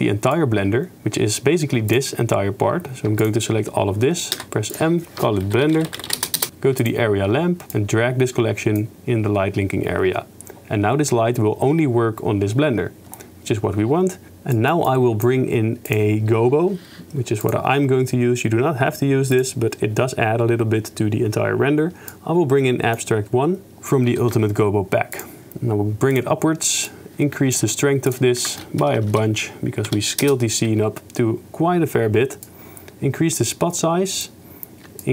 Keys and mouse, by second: 0.4 click, 4.3 m, 6.4 Return, 14.9 click, 15.9-17.5 drag, 27.0 click, 28.1-30.3 drag, 29.0 0, 29.1 0, 32.6-34.4 drag.